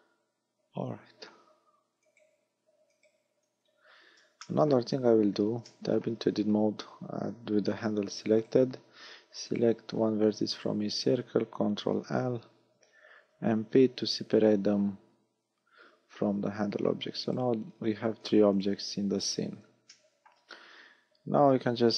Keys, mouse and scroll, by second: 2.1 right click, 3.1 right click, 3.7 Tab, 4.5 shift+middle click, 5.1 a, 5.7 shift+middle click, 8.5 right click, 9.5 shift+right click, 10.7 shift+right click, 12.2 ctrl+l, 13.6 p, 16.5 Tab, 17.3 right click, 17.7-18.1 scroll down 5, 18.3 right click, 18.7 right click, 19.3 right click, 20.1 shift+middle click.